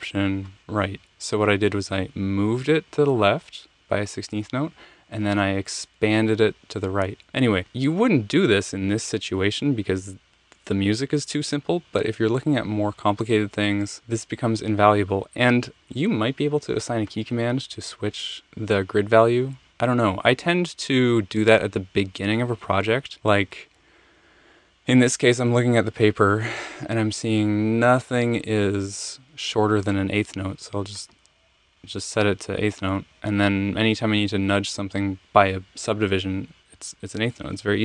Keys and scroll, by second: 0.3 alt+shift+Right.